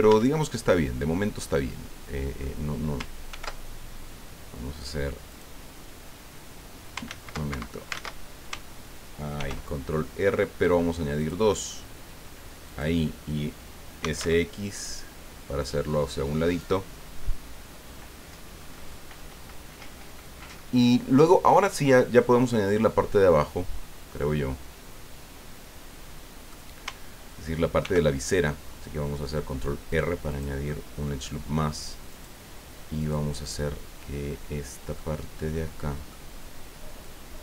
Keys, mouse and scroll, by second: 0.1 Tab, 0.4-2.6 drag, 3.3 ctrl+r, 5.3 click, 7.1 ctrl+z, 7.5 ctrl+Escape, 7.9 ctrl+z, 9.4 ctrl+r, 10.5 scroll up 2, 11.2 click, 12.7 click, 14.0 s, 14.2 x, 16.5 click, 23.4-26.7 middle drag, 27.8 ctrl+r, 28.2 ctrl+click, 30.3 click, 30.7 middle click, 32.1 click, 33.0 right click, 35.0-36.3 middle drag, 37.0-37.4 drag.